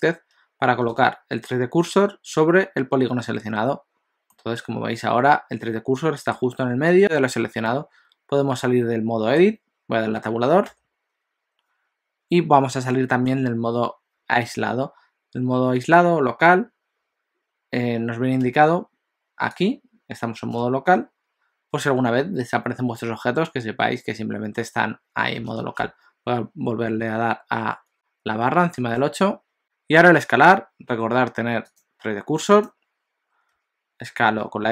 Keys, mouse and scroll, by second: 4.4 middle click, 7.7 middle click, 10.7 Tab, 29.0 KP_Divide, 31.7 click, 33.6 s.